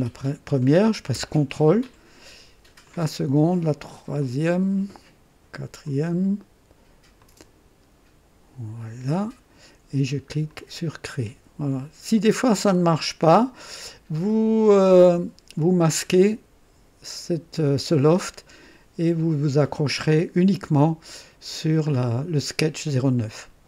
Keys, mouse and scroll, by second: 2.8 ctrl+click, 4.2 ctrl+click, 5.8 ctrl+click, 7.2 ctrl+click, 8.8 ctrl+click, 10.5 click, 13.3 click, 21.5 scroll down 1.